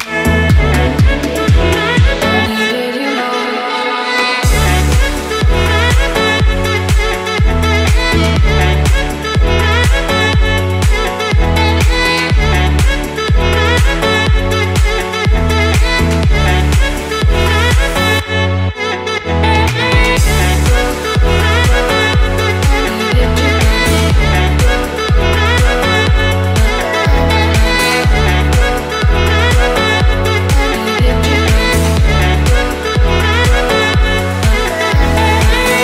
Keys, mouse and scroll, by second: 2.4 click, 3.7 click, 4.8-5.9 drag, 6.8 r, 8.6 ctrl+click, 9.2-9.9 scroll up 4, 13.3 shift+d, 13.9 y, 17.6 click, 18.6-21.0 drag, 21.8 click, 22.8 shift+d, 23.6 y, 24.7 click, 25.7-26.9 drag, 28.1 shift+click, 28.6 shift+click, 31.5 ctrl+j, 33.5-34.5 scroll down 5.